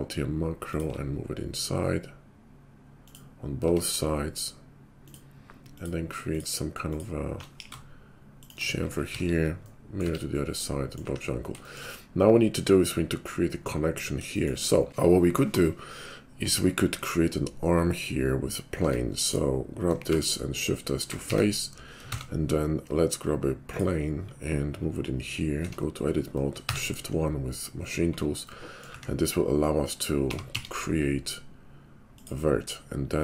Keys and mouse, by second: 3.6 Tab, 5.7 alt+click, 5.8-6.8 alt+middle drag, 6.8 alt+click, 7.5 ctrl+b, 9.2 alt+x, 10.0 Tab, 10.7-19.2 middle drag, 11.1 `, 18.8 Tab, 19.2 click, 20.0 shift+s, 21.2 Tab, 22.0 shift+a, 25.7 Tab, 26.6 shift+1, 28.8 middle click, 28.9 `, 29.2-33.2 middle drag, 30.2 g.